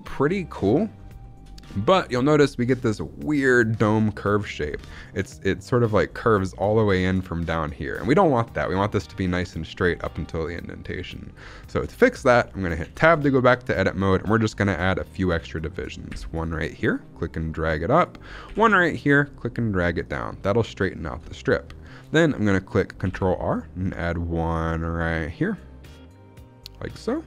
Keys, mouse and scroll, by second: 0.9-2.9 scroll up 5, 1.1 shift+middle drag, 1.7 shift+middle drag, 4.6 scroll down 2, 4.9-7.6 shift+middle drag, 8.0 shift+middle drag, 8.3-9.3 scroll up 1, 9.5 shift+middle click, 9.7-11.1 scroll up 1, 11.1 scroll up 1, 11.5 shift+middle drag, 11.9-12.5 scroll up 1, 12.7 Tab, 13.2 shift+middle click, 13.5 scroll up 1, 16.0 ctrl+r, 17.8 click, 18.4 ctrl+r, 19.9 click, 21.3 shift+middle click, 23.1 ctrl+r.